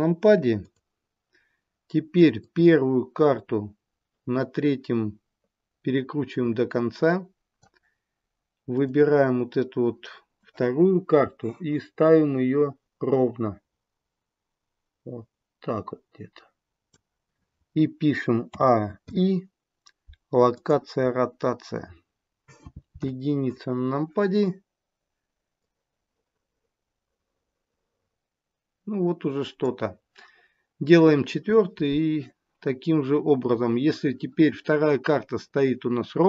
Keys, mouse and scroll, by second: 0.5 click, 2.3 click, 8.7 click, 11.9 click, 18.4 a, 19.1 i, 22.9 KP_1, 25.6 click.